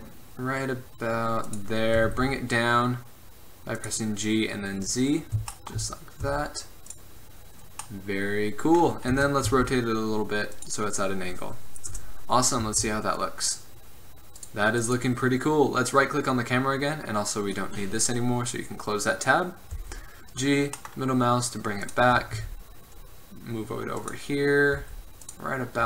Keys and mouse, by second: 2.1 g, 6.3 r, 9.3 r, 12.0 KP_0, 12.7 z, 14.5 right click, 18.9-19.4 drag, 19.9 g, 22.3 g, 24.9 g.